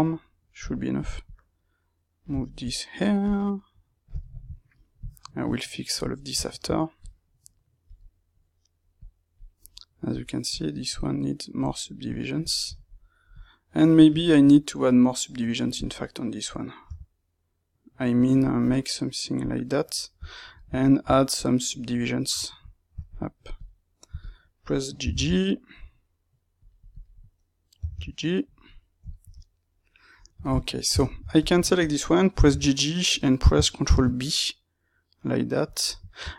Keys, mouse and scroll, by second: 2.3 shift+middle click, 3.1 click, 4.1 shift+middle click, 4.9 click, 6.1 shift+middle click, 6.9-7.9 drag, 7.9-8.9 middle drag, 8.9 click, 9.5 middle click, 10.4 click, 11.9-13.2 middle drag, 13.2 click, 14.1-15.7 middle drag, 15.7 shift+click, 16.8 g, 18.6 click, 19.6-23.5 middle drag, 23.5 click, 25.0 g, 26.9 click, 27.7 g, 28.6-31.4 middle drag, 30.9 Tab, 31.4 alt+click, 32.3 g, 33.8 ctrl+b, 35.9-36.3 middle drag.